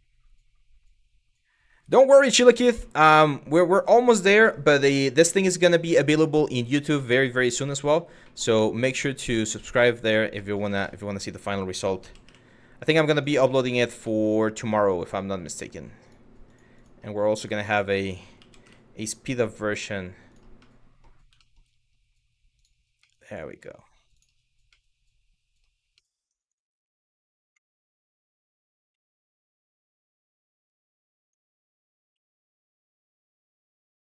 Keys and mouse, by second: 2.5 middle click, 6.6-6.9 middle drag, 9.5 click, 10.0 middle drag, 11.0 click, 11.6 g, 11.9 y, 12.8 click, 13.0-13.5 middle drag, 13.8 middle drag, 14.6 click, 15.7 click, 16.1 click, 16.4 click, 18.0 g, 18.3 y, 19.9 click, 20.3-20.7 middle drag, 21.1 shift+middle click, 22.2 click, 22.6-23.3 middle drag, 23.7 click, 24.3-25.3 middle drag, 25.7 middle drag, 26.5 middle drag, 27.2 KP_1, 28.5 KP_3, 29.8 r, 30.9 click, 31.6 r, 32.4 click.